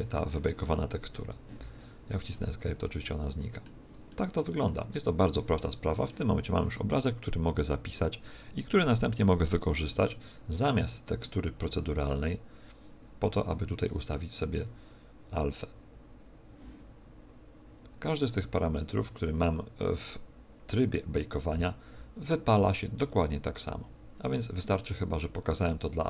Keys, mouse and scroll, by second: 1.1 Escape, 2.3 middle click, 4.1 middle click, 4.9 middle click, 10.9 click, 13.9-16.1 scroll down 16, 18.9 click, 19.9 click.